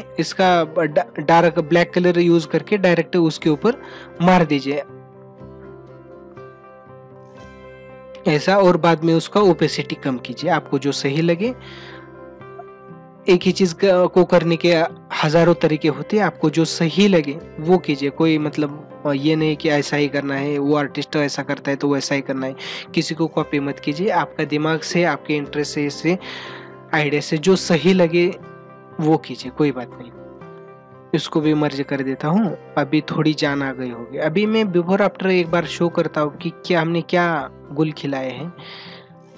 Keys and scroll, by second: 4.1 ctrl+alt+z, 32.6 ctrl+=.